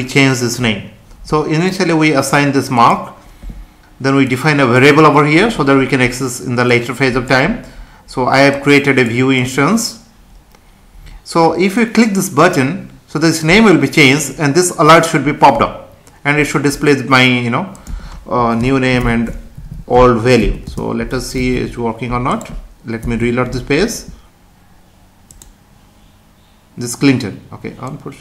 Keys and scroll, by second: 18.6 BackSpace, 19.5 Right, 20.4 Left, 20.7 space, 21.4 ctrl+s, 23.0 F5.